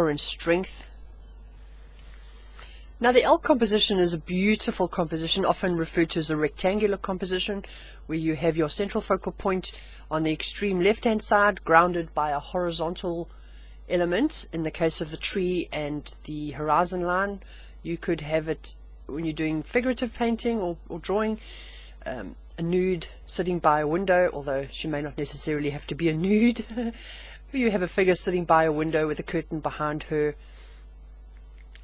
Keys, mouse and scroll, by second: 1.4-3.1 drag, 4.3 click.